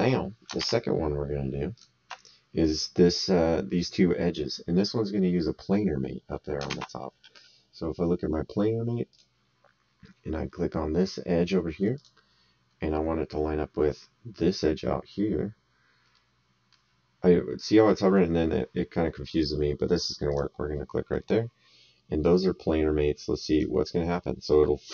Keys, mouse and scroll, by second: 0.6 alt+Tab, 1.7 alt+click, 6.7 alt+Tab, 9.1 click, 11.9 click, 16.1 middle click, 20.3 click, 23.5 click.